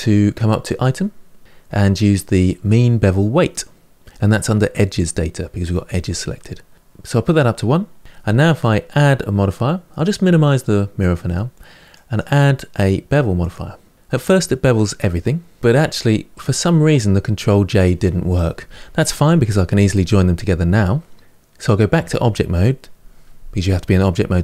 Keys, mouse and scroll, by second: 1.4 click, 6.7-8.6 drag, 10.8 click, 11.7 click, 13.3 click, 13.9-15.6 middle drag, 15.6 Tab, 15.8-19.4 shift+middle drag, 21.7 Tab.